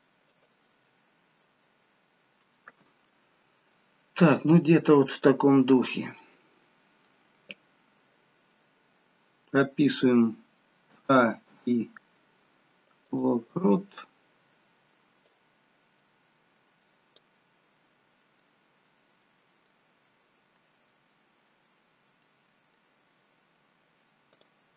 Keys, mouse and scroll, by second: 0.8 middle click, 3.0-3.7 scroll down 1, 5.4-6.3 scroll down 6, 6.3 middle click, 11.0 a, 11.6 i, 15.6 click, 18.1 scroll up 5, 18.4 middle click, 21.0 scroll up 1, 22.3 middle click, 24.4 click.